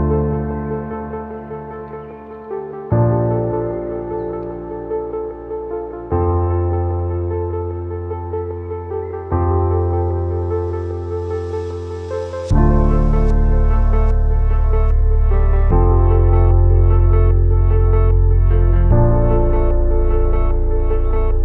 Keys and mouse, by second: 2.5 click, 3.0-3.6 drag, 4.0-5.6 drag, 9.5 click, 10.1 click, 10.4 click, 10.9 click, 11.6 Right, 12.8-13.4 drag, 18.7 space.